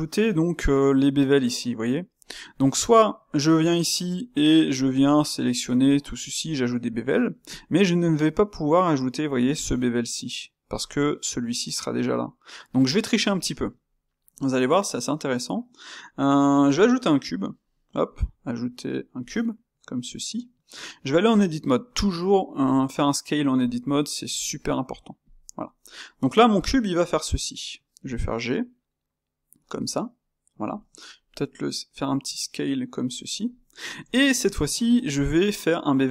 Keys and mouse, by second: 3.2 click, 3.6 shift+middle click, 4.3 Tab, 4.7 click, 12.9 Tab, 13.6-19.2 ctrl+middle drag, 19.2 shift+a, 19.9-20.7 middle drag, 20.7 Tab, 21.1-22.5 middle drag, 22.5 s, 23.7 middle click, 24.2 s, 25.3-27.2 middle drag, 27.2 Tab, 28.0 g, 29.7-30.7 middle drag, 30.7 Tab, 31.1 s, 33.4-34.6 middle drag, 34.6 Tab, 35.2 ctrl+alt+click.